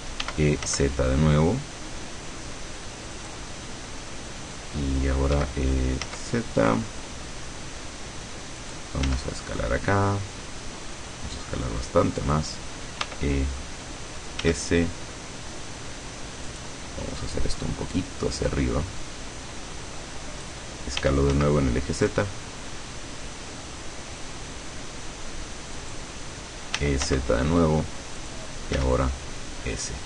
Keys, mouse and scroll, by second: 0.3 e, 0.8 z, 3.3 click, 5.5 e, 8.7 click, 9.2 s, 12.3 click, 13.1 e, 14.5 s, 16.6 click, 17.5-20.7 drag, 21.1 e, 21.4 z, 25.9 click, 26.9 e, 27.1 z, 28.3 click, 28.9 s.